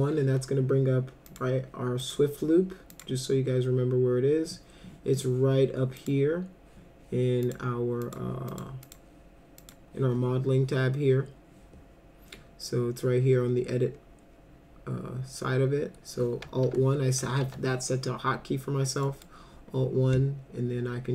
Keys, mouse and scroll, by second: 1.3 click, 2.0 click, 2.9 click, 6.0 click, 7.4 click, 8.1 click, 8.5 click, 8.8 click, 9.6 click, 16.7 alt+1, 17.4 alt+1, 19.1 middle click.